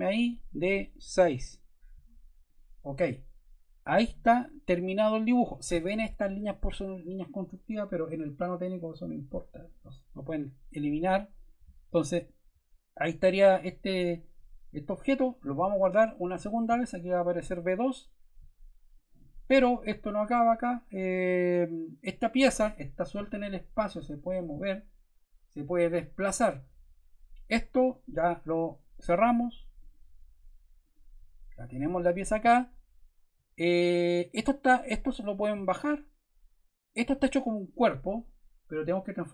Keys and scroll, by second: 1.3 Return.